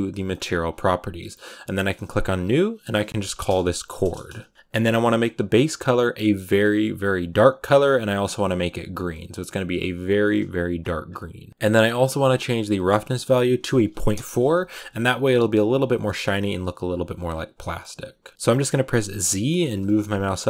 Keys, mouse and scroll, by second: 2.0-4.5 drag, 4.5 KP_0, 6.0 click, 14.0-17.5 drag, 17.5 shift+middle click, 17.9 a, 18.3 z, 19.8 z, 20.3 shift+middle click.